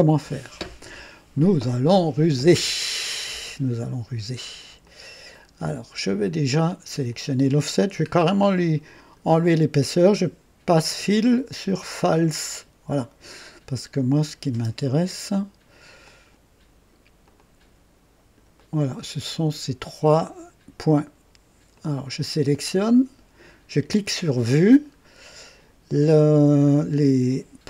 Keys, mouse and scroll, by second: 4.8-6.1 drag, 7.0 click, 8.1 scroll down 1, 9.0 click, 11.1 click, 12.1 click, 12.5 click, 14.2 click, 14.5 space, 14.5 space, 16.0-17.1 drag, 17.2-19.1 drag, 18.6 right click, 21.7 click, 24.0 click, 24.9-25.4 scroll down 1.